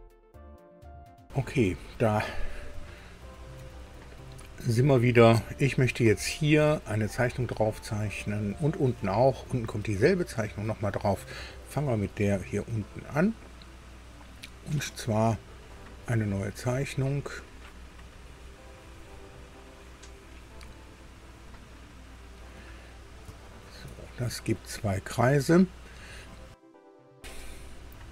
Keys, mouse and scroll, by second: 2.8 shift+click, 4.5 scroll up 2, 10.2-11.6 drag, 12.8 click, 16.7 click, 23.0 scroll down 1, 23.3 shift+middle click, 26.1 click, 27.7 click.